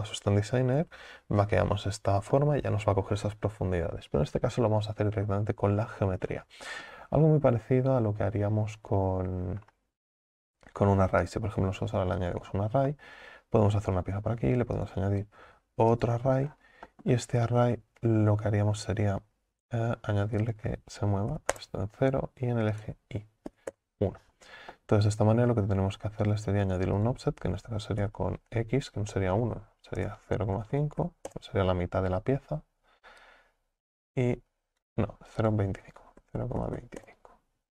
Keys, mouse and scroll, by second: 2.4-5.0 shift+middle drag, 5.0-5.9 scroll down 2, 5.9-9.7 middle drag, 12.4-12.9 drag, 12.9-14.8 middle drag, 16.1 click, 16.5 scroll down 4, 16.9-17.6 shift+middle drag, 17.6-18.4 scroll down 4, 20.5-24.8 drag, 24.8-27.0 middle drag, 27.0-30.1 drag, 33.2-37.7 drag.